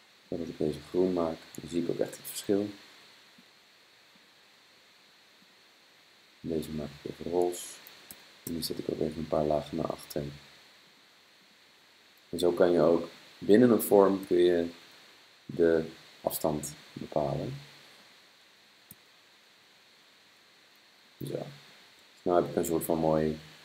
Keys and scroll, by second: 2.2 super+[, 2.8 super+[, 8.2 super+[, 8.5 super+[, 14.3 super+[, 14.4 super+[, 15.0 super+], 18.9 super+[, 19.6 super+], 20.5 super+[, 21.0 super+].